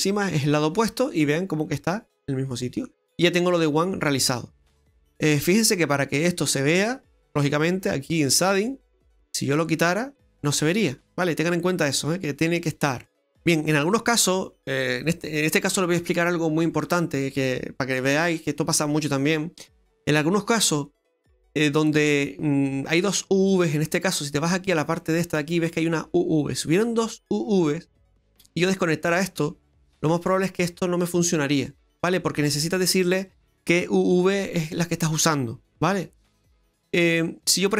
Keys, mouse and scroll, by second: 1.1 middle click, 8.3 click, 9.9 click, 11.9 click, 13.0 middle click, 13.4 scroll up 2, 13.9 middle click, 24.9 click.